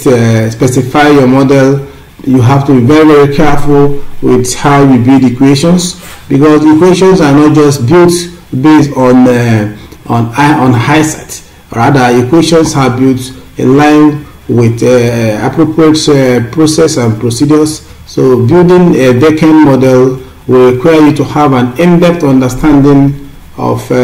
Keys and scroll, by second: 6.3 Up, 17.9 Up, 19.5 Up, 20.4-21.5 scroll up 3.